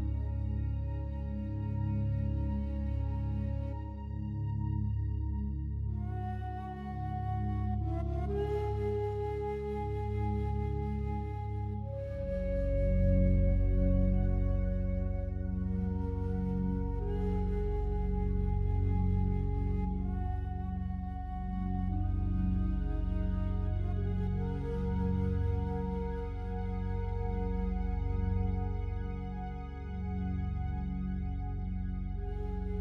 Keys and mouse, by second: 0.0 click, 0.6 click, 1.4 click, 2.3 g, 4.0 Escape, 5.1-10.2 drag, 11.9 click, 12.7 shift+click, 13.9 g, 14.2 z, 19.4 Escape, 20.9 click, 22.0 click, 24.4 click, 25.3 click, 27.0 click, 27.9 click, 29.3 click, 29.7 click, 31.7 i, 32.6 click.